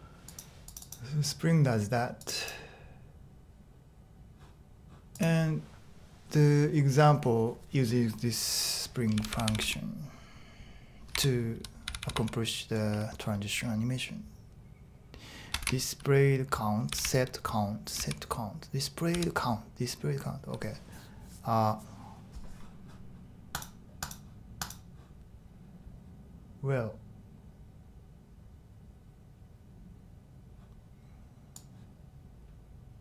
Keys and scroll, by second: 9.1-9.6 typing, 10.9-12.6 typing, 15.6 shift+8, 16.6-18.0 typing, 19.1 typing.